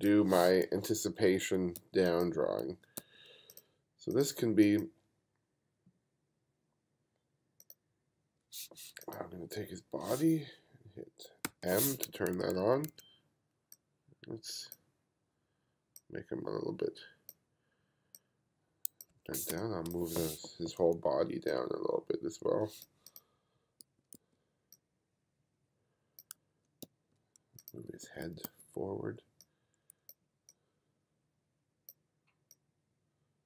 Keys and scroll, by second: 1.4 f, 1.8 g, 2.7 f, 3.0 g, 11.5 m, 12.4 2, 19.2 1, 19.5 space, 23.9 b, 26.4 h, 26.9 g, 27.9 b.